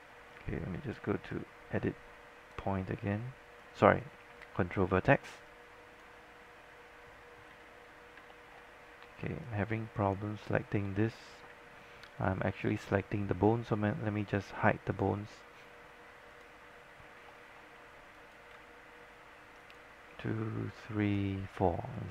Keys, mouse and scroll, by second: 0.4-5.5 right drag, 7.6 z, 8.1-9.0 scroll up 3, 9.5 shift+click, 11.0-11.4 scroll down 1, 15.0 click, 17.0 scroll up 1, 17.6 alt+middle click, 18.2 click, 19.7 shift+click, 22.0 shift+click.